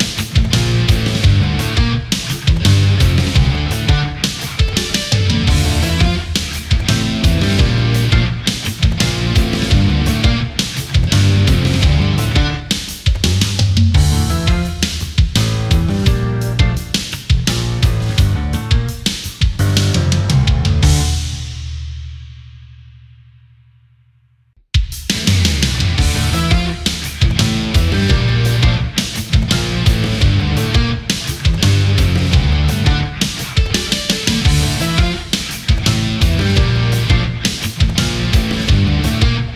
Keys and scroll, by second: 4.0 Delete, 4.9 space, 14.3 space, 18.0 ctrl+z, 24.9 space, 30.2 space.